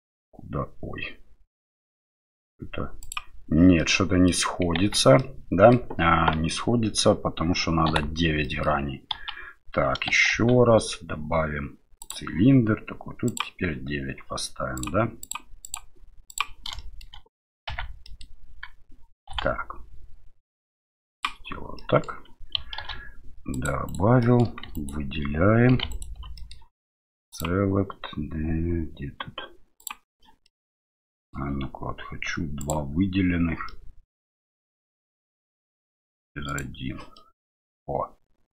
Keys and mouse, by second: 3.1 click, 3.8 middle click, 4.7 Tab, 5.2 middle click, 7.9 Delete, 8.4 middle click, 9.1 KP_1, 10.3 shift+a, 13.2 click, 14.7 click, 15.6 click, 16.9 shift+click, 17.7 Tab, 18.0 middle click, 19.3 s, 21.8 middle click, 22.8 ctrl+r, 24.3 middle click, 24.7 alt+right click, 25.7 3, 25.9 alt+right click, 26.3 middle click, 27.5-29.9 drag, 30.4 middle click, 32.7-33.7 drag, 33.7-35.2 middle drag, 36.5 click, 37.1-38.5 middle drag.